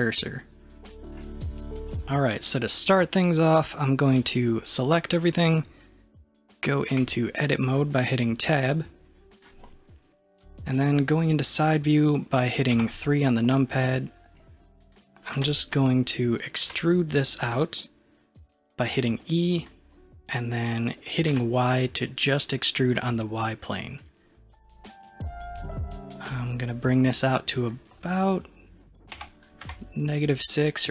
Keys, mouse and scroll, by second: 0.2-1.6 middle drag, 1.6 scroll down 1, 4.2 a, 7.0 Tab, 8.5-11.6 middle drag, 12.8 KP_3, 13.9-14.3 scroll up 2, 14.5-15.7 scroll down 1, 16.7 e.